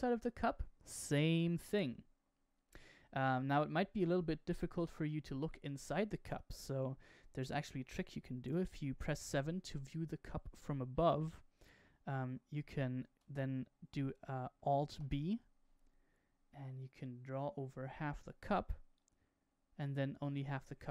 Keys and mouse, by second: 4.1-4.7 shift+middle drag, 8.9 KP_7, 11.6 Tab, 12.2 Tab, 14.8 alt+b, 20.2-20.9 middle drag.